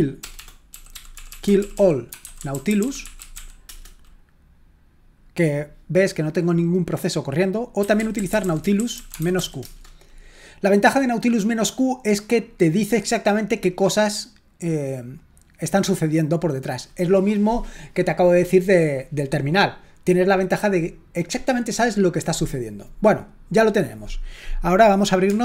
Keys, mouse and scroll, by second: 0.0-3.8 typing, 7.5-9.8 typing.